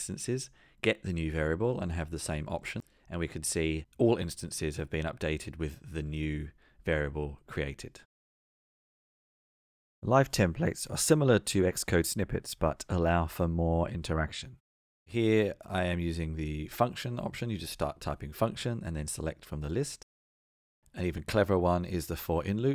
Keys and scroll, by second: 1.4 Return, 16.9 Return.